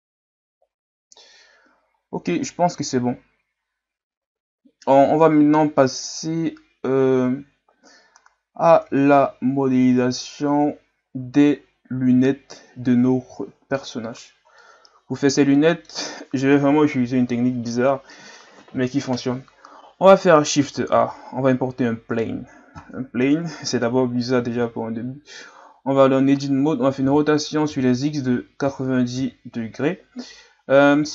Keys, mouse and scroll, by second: 3.2-4.0 scroll down 1, 4.0-5.2 scroll down 1, 5.2-6.3 scroll down 1, 9.3-10.5 scroll down 3, 10.5-12.5 scroll down 1, 12.5-13.5 scroll down 6, 13.5-14.5 scroll down 9, 14.6-16.5 middle drag, 16.5 KP_1, 20.9 shift+a, 23.3 KP_Divide, 24.6 Tab, 27.0 r.